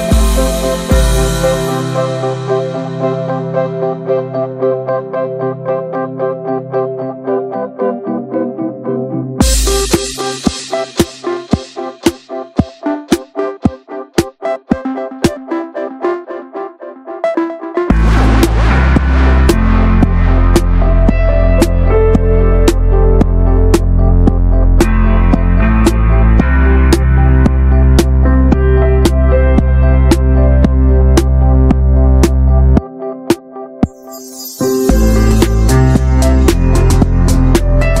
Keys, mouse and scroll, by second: 0.3 ctrl+b, 2.2 middle drag, 2.4 Tab, 2.6 right click, 3.3-4.9 drag, 5.1-5.4 middle drag, 5.4 ctrl+s, 5.5-5.9 middle drag, 5.9-6.2 scroll down 1, 6.2-7.3 shift+middle drag, 7.3 scroll up 2, 7.5 ctrl+s, 7.7 middle click, 8.1-9.5 middle drag, 9.5 Tab, 9.8-10.1 shift+middle drag, 10.1-10.8 ctrl+z, 11.1 alt+middle click, 11.4 alt+z, 11.6 scroll up 1, 11.8 shift+middle click, 12.0-13.1 drag, 13.6 alt+z, 13.8-14.1 drag, 14.1 middle click, 14.4 alt+z, 14.9 alt+shift+drag, 15.1 alt+z, 15.3 middle click, 15.7 ctrl+s, 15.8-16.9 shift+middle drag, 16.9 click, 17.5-18.0 middle drag, 18.0 ctrl+b, 20.4-21.2 middle drag, 21.2-21.7 drag, 21.7 middle click, 22.0 ctrl+b, 23.7 middle click, 23.9 click, 24.0-24.6 right drag, 24.6 click, 24.7 right click, 25.4-25.7 drag, 25.7 scroll down 2, 25.8 middle click, 26.0 ctrl+s, 26.3 middle drag, 26.6 click, 27.0 /, 27.3 middle drag, 27.4 Tab, 27.5 scroll up 1, 27.7 shift+middle click, 28.3 scroll up 1, 28.6-29.5 shift+middle drag, 29.5 click, 30.0 3, 30.0 click, 30.4 middle click, 30.9-31.3 scroll up 1, 31.3 shift+click, 31.5 scroll up 2, 31.7 shift+middle click, 32.2 i, 33.6 middle click, 33.7 scroll up 1, 33.8 shift+middle click, 34.2 e, 36.2-36.8 scroll up 2, 36.5 shift+middle click, 36.8 2, 37.0 click, 37.2-37.5 scroll up 1, 37.8-38.0 scroll down 4.